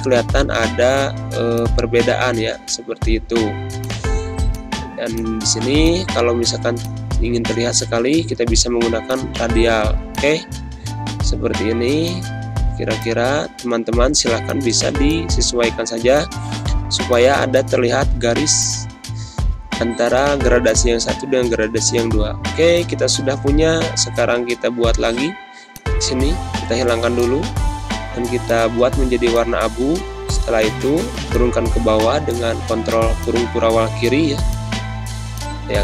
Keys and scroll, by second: 1.2 g, 2.6 space, 4.9 space, 6.6 space, 7.9 ctrl+-, 19.7 ctrl+-, 20.4 space, 26.0 d, 29.7 ctrl+shift+[, 30.3 space, 32.0 z, 32.7 space.